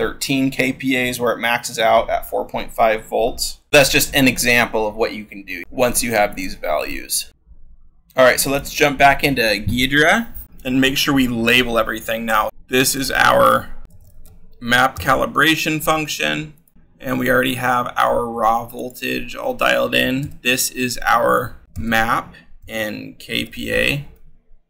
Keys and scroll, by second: 6.6 ctrl+z, 8.5-9.2 scroll, 11.0-12.5 scroll, 12.5 l, 13.6-14.9 typing, 20.1 l, 21.4-24.0 typing.